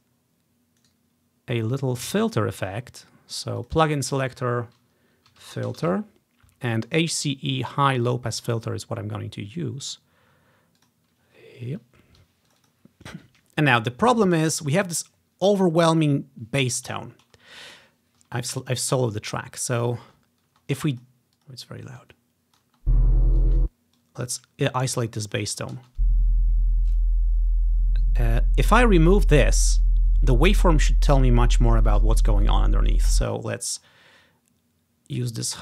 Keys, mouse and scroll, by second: 0.1 click, 1.0-2.2 drag, 3.7 click, 5.5-6.0 typing, 8.1 click, 10.9 click, 12.6 click, 14.2-15.7 drag, 14.8-15.7 ctrl+scroll up 1, 16.1-16.8 scroll up 1, 17.2-18.4 scroll down 1, 18.4-19.0 scroll down 1, 20.2-24.1 typing, 20.9 click, 22.1-26.8 drag, 25.7-26.4 typing, 33.1 space, 33.5 click, 35.4-35.6 drag.